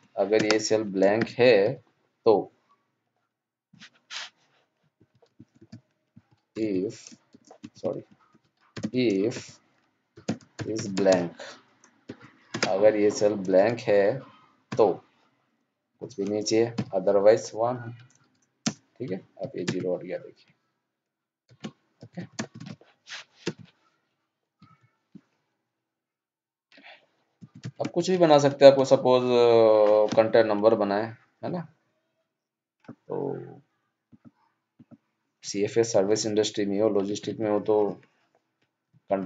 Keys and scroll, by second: 21.4 ctrl+0, 27.9 ctrl+s.